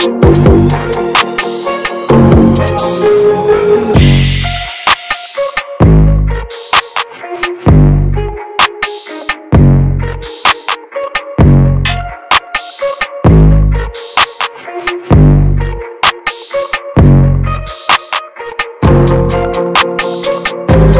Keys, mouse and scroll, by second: 0.5 ctrl+z, 0.9-2.4 ctrl+drag, 2.4 middle click, 2.6-3.1 scroll up 1, 3.4 ctrl+z, 4.4 ctrl+scroll down 1, 5.3-6.7 drag, 6.7 middle click, 7.1 ctrl+z, 7.4-8.5 ctrl+drag, 8.5 ctrl+z, 9.4-13.6 drag, 13.6 ctrl+z, 14.0 ctrl+click, 14.7 ctrl+z, 15.2 shift+f, 16.2-17.6 drag, 17.6 ctrl+z, 18.5 shift+f, 20.6-20.9 ctrl+scroll down 2.